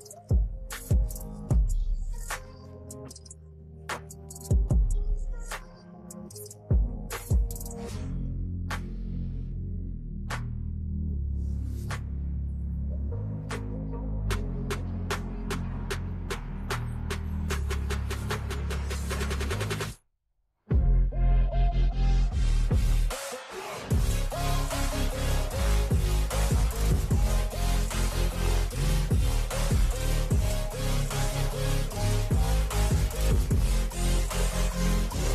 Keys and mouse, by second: 0.2 click, 2.2 Right, 2.4 Right, 2.6 Right, 3.3 Left, 4.0 BackSpace, 5.3 click, 5.6 BackSpace, 7.1 click, 8.0 Left, 8.1 Left, 8.4 Down, 8.5 Down, 8.7 Down, 9.0 Down, 9.2 Down, 9.7 Down, 10.3 Down, 10.6 Down, 10.8 Down, 12.4 u, 14.4 click, 19.4 shift+click, 24.0 click, 25.4 ctrl+h, 26.4 ctrl+h, 27.6 ctrl+h, 31.0 Right, 33.3 ctrl+j.